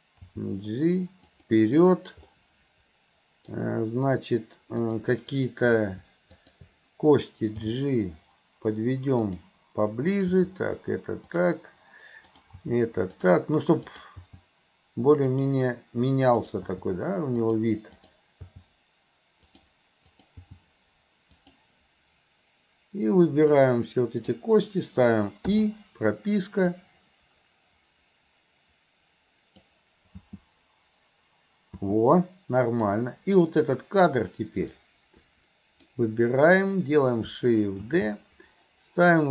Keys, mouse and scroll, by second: 3.5 middle click, 4.8 click, 6.4 click, 10.1 click, 12.3 click, 13.9 click, 16.4 click, 17.9 click, 20.1 click, 23.5-24.4 drag, 26.8-29.7 drag, 32.9-33.4 drag, 34.8-35.9 drag.